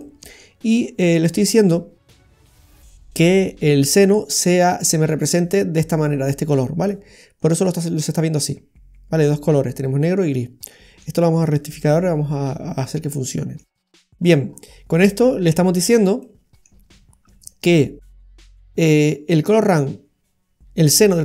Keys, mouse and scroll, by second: 0.0 middle click, 7.4 scroll down 1, 7.6 middle click, 12.2-13.1 scroll down 6, 13.1 middle click, 14.2-15.9 scroll up 6, 16.2 middle click, 17.7 middle click.